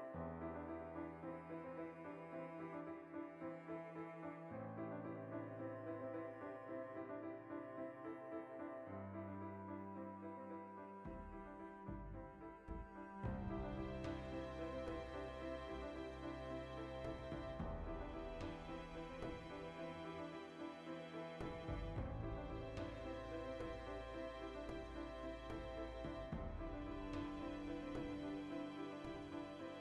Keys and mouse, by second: 2.0-3.1 alt+right drag, 3.1 ctrl+b, 4.6 click, 4.8 middle click, 5.4 ctrl+r, 5.7 right click, 5.8 ctrl+r, 6.1 right click, 6.2 ctrl+r, 6.6 alt+shift+right click, 7.2 ctrl+b, 8.1 click, 8.2-9.3 middle drag, 9.3 ctrl+r, 9.9 right click, 10.6 ctrl+r, 10.9 right click, 11.0 ctrl+r, 11.2 alt+shift+right click, 12.1 s, 13.4 Return, 15.5 click, 16.0 ctrl+z, 18.5 Tab, 19.0 ctrl+2, 21.6 Tab, 21.8 shift+middle click, 22.6-24.1 alt+shift+right drag, 24.1 click, 24.7 ctrl+b, 26.3 click, 27.1-28.4 alt+right drag, 28.4 ctrl+x, 29.0 click.